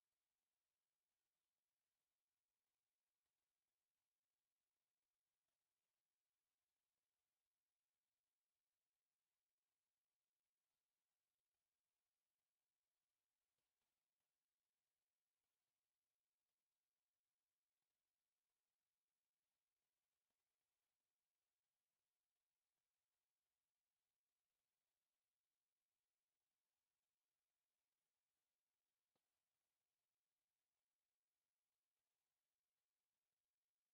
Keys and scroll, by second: 0.0-2.5 typing, 1.0 Escape, 2.2 Escape, 3.6 Escape, 4.5-6.2 typing, 4.9 Escape, 6.9 Escape, 7.2 s, 7.3 space, 8.3 Escape, 8.5 t, 8.6 space, 9.2 Escape, 11.1 space, 12.0 1, 12.1 Return, 15.7 Escape, 16.6 space, 17.4 Escape, 18.4 o, 18.5 space, 18.6 9, 18.7 space, 19.5 Escape, 19.7 o, 19.8 space, 20.3 Escape, 20.4 e, 20.7 space, 21.3 Escape, 22.5 t, 22.6 space, 23.0 Escape, 26.8 s, 26.9 space, 29.0 2, 30.0 Return, 31.5 2.